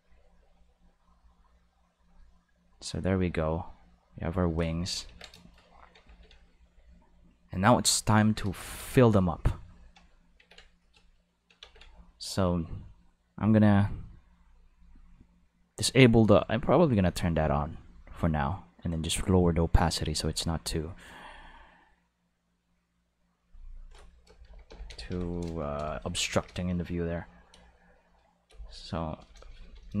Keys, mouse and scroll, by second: 0.5-1.9 drag, 2.5 click, 4.0-5.0 drag, 5.1 ctrl+s, 6.1 ctrl+s, 10.4 ctrl+s, 11.1 shift+middle click, 11.6 ctrl+s, 13.5 click, 14.7 click, 15.8 click, 16.3 click, 17.0 click, 17.7-19.2 drag, 20.0 click, 21.1 click, 23.4 click, 23.5 click, 24.4 shift+l, 24.7 shift+i, 24.9 shift+n, 25.1 shift+g, 25.8 Left, 26.2 shift+e, 28.5-30.0 typing.